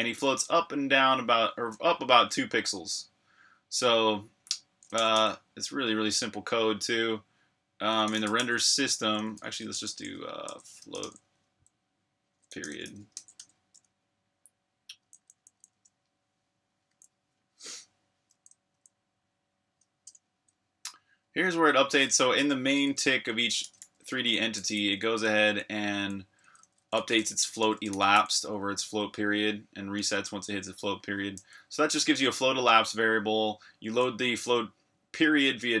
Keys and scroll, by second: 0.0-0.4 typing, 1.7 Escape, 4.7-5.6 typing, 7.8-13.9 typing, 15.0-15.8 typing, 16.9 typing, 18.7 typing, 20.0 Return, 22.0-28.8 typing, 29.9-31.4 typing, 33.7 k.